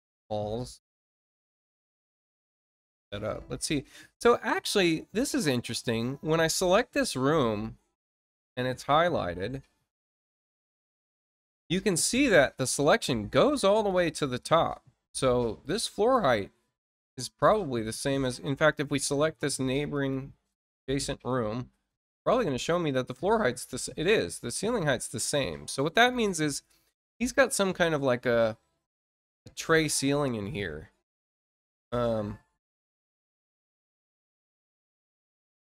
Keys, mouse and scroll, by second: 1.8 click, 12.6 click, 13.8 click, 18.6 ctrl+click, 19.8 ctrl+shift+click, 26.0 ctrl+click, 27.3 click.